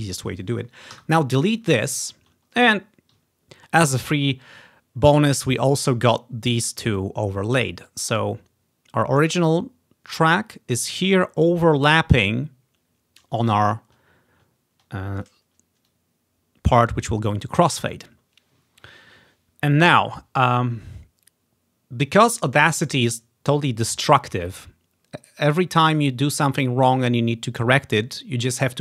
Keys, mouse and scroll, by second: 1.0 Delete, 2.3-2.6 ctrl+scroll up 1, 2.6 typing, 3.3-3.7 ctrl+scroll up 2, 5.7 click, 7.4 click, 7.4 typing, 9.8 typing, 13.6 scroll down 1, 14.7-15.0 scroll down 2, 15.0 scroll up 1, 16.0-17.7 drag, 18.7 click.